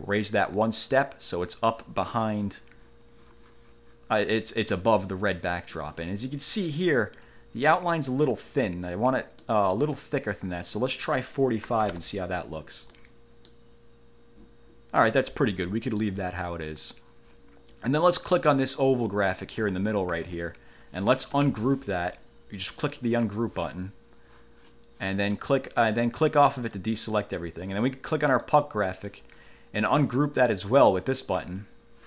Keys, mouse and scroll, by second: 1.0 click, 6.9-7.3 ctrl+scroll up 2, 7.9-8.5 ctrl+scroll down 4, 8.8 ctrl+scroll up 2, 9.6 ctrl+middle click, 10.7 click, 11.6-12.5 typing, 13.1 middle click, 15.8 middle click, 18.8 click, 19.5 click, 20.3 ctrl+z, 21.6 ctrl+shift+g, 22.8 click, 26.7 click, 28.6 click, 31.1 click.